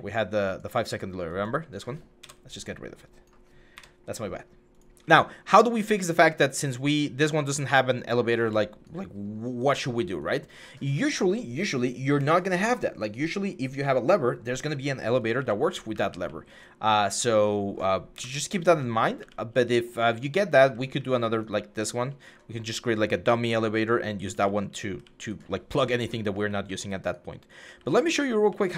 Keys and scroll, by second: 2.0 Delete, 3.5 Delete, 7.3-8.4 typing, 9.5 typing, 15.1-16.0 typing, 17.9 Delete, 18.7-28.2 typing.